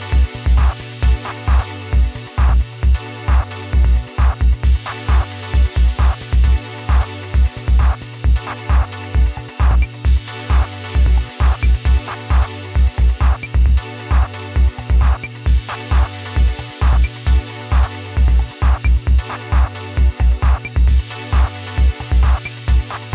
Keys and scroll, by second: 6.9-7.9 typing.